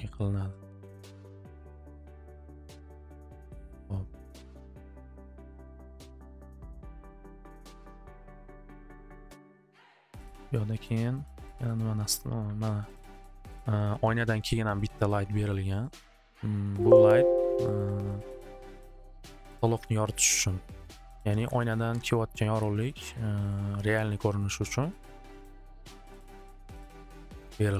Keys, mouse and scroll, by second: 0.0 click, 0.3 click, 0.5 click, 1.2 click, 1.5 click, 1.7 click, 1.9 click, 2.3 click, 6.4 click, 9.3 click, 10.5 alt+middle click, 10.8 middle click, 11.6 click, 15.5 click, 16.0 middle click, 16.2 right click, 16.8 click, 17.3 click, 18.0 alt+middle click, 21.5 alt+w, 21.9 alt+w, 25.4 click, 26.7 click.